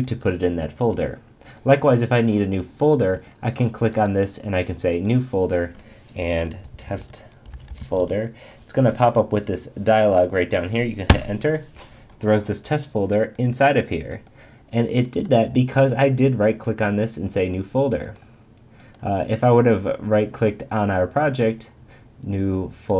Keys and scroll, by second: 11.1 Return.